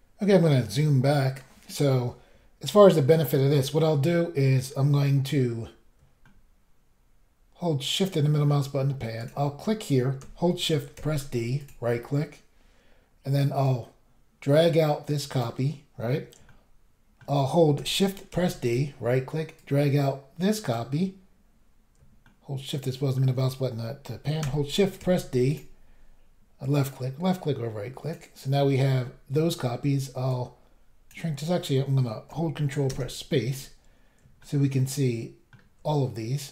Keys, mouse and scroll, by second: 0.1-1.3 scroll down 3, 6.2 shift+middle click, 9.2 click, 9.3 click, 11.0 d, 11.7 click, 13.6 click, 16.5 shift+middle click, 18.3 d, 18.6 click, 18.7 click, 19.6 click, 25.0 d, 25.6 click, 26.9 click, 28.9 scroll down 1, 30.3 click, 32.9 ctrl+space, 33.5-34.1 scroll down 1, 34.4 shift+middle click.